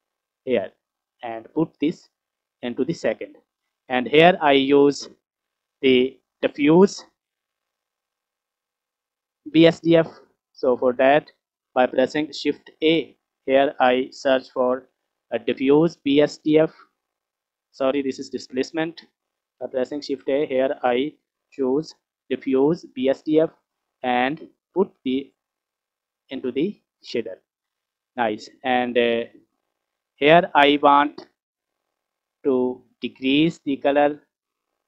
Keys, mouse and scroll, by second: 1.3-2.6 drag, 4.0-7.3 drag, 8.0-10.2 scroll up 1, 10.2 scroll down 1, 10.3 middle click, 10.9 click, 12.5 shift+a, 18.5 Delete, 19.8 shift+a, 24.5-26.9 drag, 27.7-28.4 scroll up 1, 29.4-30.3 scroll down 3, 31.4 click.